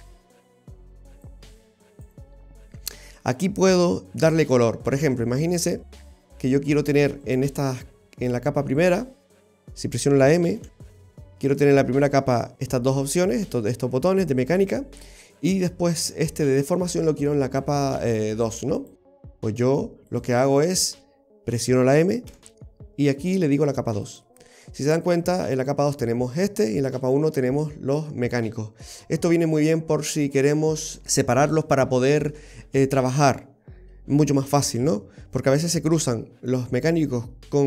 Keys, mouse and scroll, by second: 1.3 click, 2.6-4.1 scroll down 1, 5.7-6.2 scroll up 2, 7.3 right click, 9.3 shift+right click, 10.7 m, 15.4 right click, 18.8 click, 20.1 click, 22.3 m, 25.6 click, 27.0 click, 28.9-29.3 scroll up 2, 29.3-31.0 scroll down 2, 29.6 middle click, 31.3-31.7 scroll down 1, 31.7 middle click.